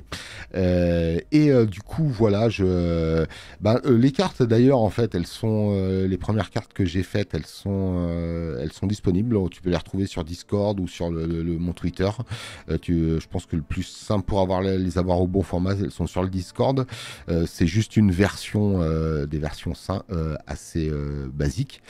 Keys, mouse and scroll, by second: 8.9 space, 9.1 click, 10.5 click, 16.7 space.